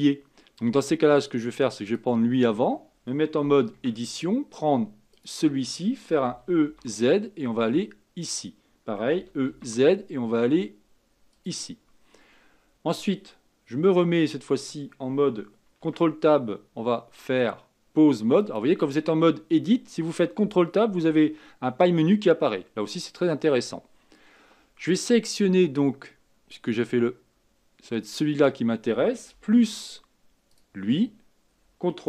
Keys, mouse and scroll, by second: 1.8 click, 3.7 Tab, 5.1 click, 6.2 e, 9.1 e, 15.8 ctrl+Tab, 27.9 click, 30.5 shift+click.